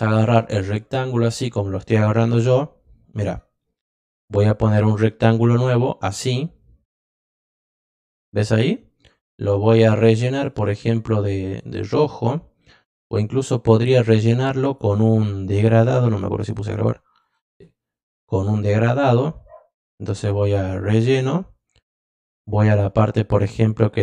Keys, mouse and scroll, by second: 1.0 click, 4.5-7.4 drag, 9.6 click, 11.4 click, 14.6 click, 16.3 click, 17.2 click, 20.5 click.